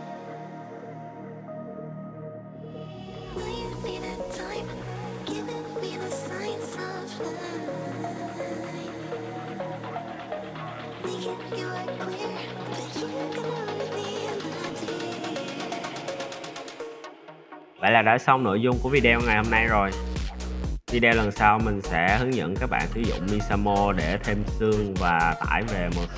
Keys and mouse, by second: 0.0 shift+d, 1.2-2.5 drag, 2.0 BackSpace, 3.3 middle drag, 3.7 Tab, 4.2 z, 4.4-5.1 middle drag, 5.2 middle click, 5.5 alt+click, 5.6 x, 6.3 click, 6.4 ctrl+z, 6.6-7.0 drag, 7.3 click, 8.0 x, 9.1 `, 9.4 `, 9.7 alt+drag, 10.0 g, 10.7 drag, 11.1 `, 12.5 l, 12.7 s, 13.5 e, 13.7 s, 14.1 click, 15.0 s, 15.3 Tab, 15.5 z, 15.8 a, 15.9 a, 16.2 click, 16.6 click, 16.9 a, 17.2 click, 18.3-19.7 drag, 20.0 click, 20.5-20.8 middle drag, 21.1 shift+middle drag, 23.6-26.1 middle drag.